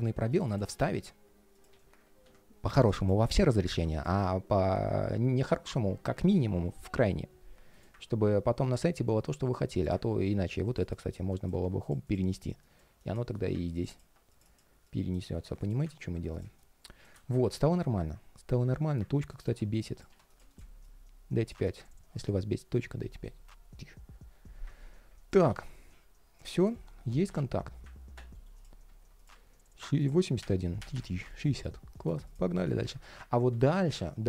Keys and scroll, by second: 1.4 super+a, 1.7 shift+super+v, 2.0 super+z, 3.0 super+a, 3.6 shift+super+v, 11.3 alt+space, 15.1 alt+space, 26.5 ctrl+shift+3, 28.1 ctrl+shift+3, 32.3 alt+i, 32.5 super+s.